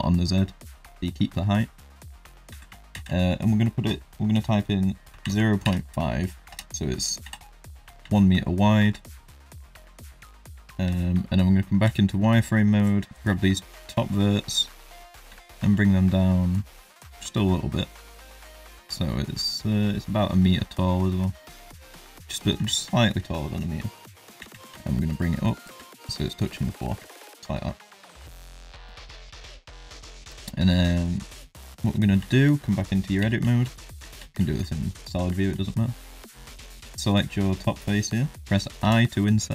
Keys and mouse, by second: 2.5 s, 7.2 KP_1, 8.1 shift+middle drag, 8.8 Tab, 9.2 shift+middle click, 10.8 z, 12.3 shift+middle click, 13.0 click, 13.3 shift+middle click, 15.3 g, 22.6 Tab, 22.9 shift+middle drag, 24.3 g, 27.1 shift+middle drag, 28.6 middle drag, 29.1 shift+middle drag, 30.6 shift+middle drag, 31.5 middle drag, 32.2 Tab, 32.7 middle click, 33.2 3, 33.5 shift+middle click, 34.0 z, 34.4 shift+middle click, 35.0 middle click, 35.4 shift+middle click, 36.9 click.